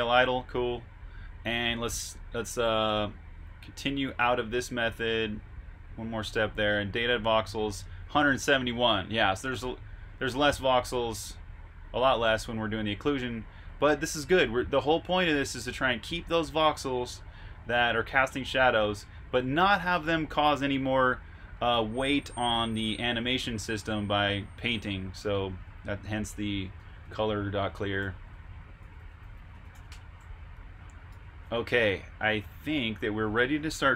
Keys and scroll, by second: 25.1 super+Tab, 26.7 Escape, 27.2-32.2 typing.